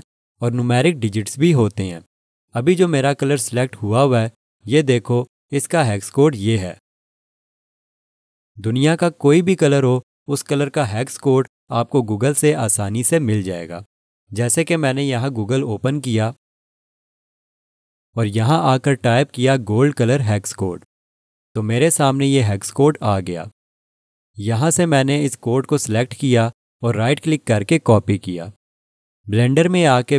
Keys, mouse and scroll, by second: 14.9 click, 25.1 right click, 28.0 click, 28.4 typing, 29.5 click.